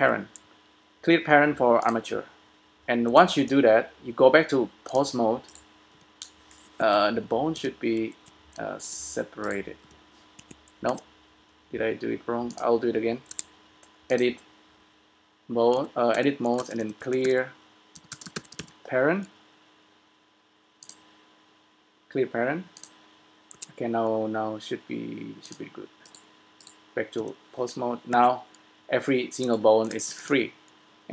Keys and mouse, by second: 3.4 Tab, 5.5-6.5 right drag, 6.0 g, 7.8 g, 9.0-11.3 drag, 10.0 g, 11.0 Tab, 13.3 Tab, 15.9 a, 16.2 a, 16.9 space, 23.7 Tab, 26.3 click, 27.5 g, 30.3 s.